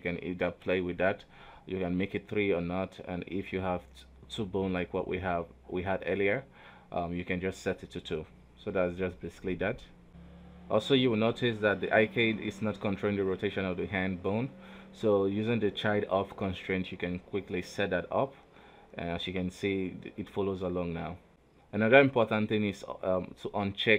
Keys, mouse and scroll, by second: 0.3-2.9 drag, 2.9 ctrl+z, 3.1 ctrl+z, 3.3 ctrl+z, 3.5 ctrl+z, 4.6 ctrl+alt+z, 8.0 ctrl+z, 8.3 ctrl+z, 8.4 ctrl+z, 8.7 ctrl+z, 8.9 ctrl+z, 9.2 ctrl+z, 9.4 ctrl+z, 9.7 ctrl+z, 10.0 ctrl+z, 10.1 right click, 10.4 ctrl+z, 10.9 r, 12.3 g, 13.0 r, 15.1 shift+right click, 16.6 ctrl+shift+c, 19.3-20.5 drag, 20.5 right click, 20.8 r, 21.9 right click.